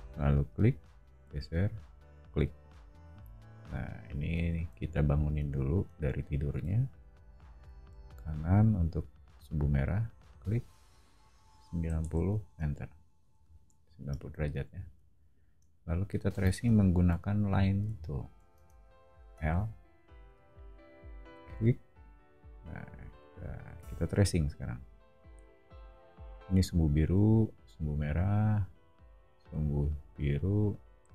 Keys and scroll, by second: 3.2 o, 6.5 q, 7.8 Right, 11.6-13.4 typing, 18.5 space, 19.3 l.